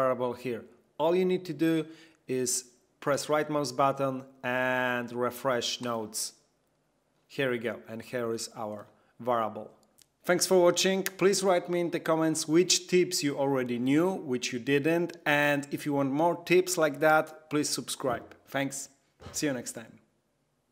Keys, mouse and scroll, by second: 1.8 right click, 5.8 click, 8.1 click.